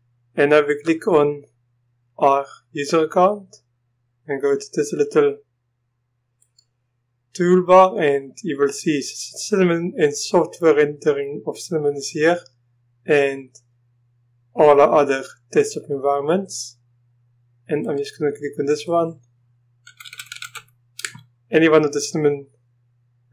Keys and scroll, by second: 19.9-20.6 typing, 21.1 Return.